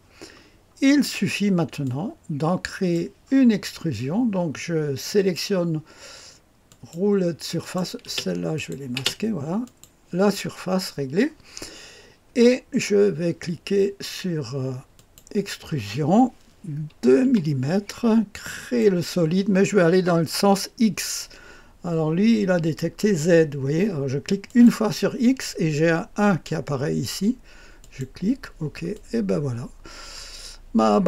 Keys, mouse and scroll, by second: 1.8-3.1 drag, 5.1 click, 6.6 click, 7.6 click, 8.1 space, 8.6 click, 8.9 space, 9.6 click, 14.9 click, 15.5-17.2 drag, 17.2 KP_2, 18.4 click, 24.4 click, 27.8 click, 28.9-31.0 drag.